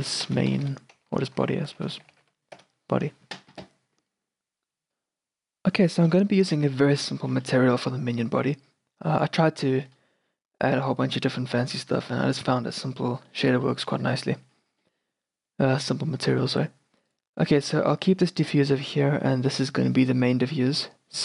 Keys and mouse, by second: 1.2 BackSpace, 1.3 BackSpace, 6.5-7.5 middle drag, 8.2-9.9 drag, 9.9 middle click, 15.5-17.2 middle drag, 17.2-21.2 drag.